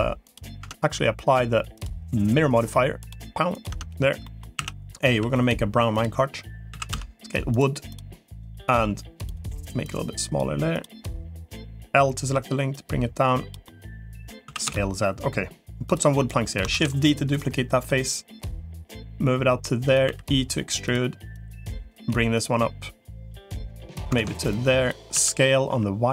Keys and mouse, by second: 0.4 Tab, 1.6 click, 3.4 click, 4.4 a, 5.0 g, 6.6 s, 8.6 middle click, 9.8 click, 10.6 click, 11.2 middle click, 12.2 l, 12.6 click, 13.6 middle click, 14.4 s, 16.6 shift+d, 17.2 click, 18.4-19.8 drag, 20.0 e, 21.2 click, 21.6 click, 22.2-23.4 drag, 24.0 ctrl+z, 24.4 click, 25.0 s.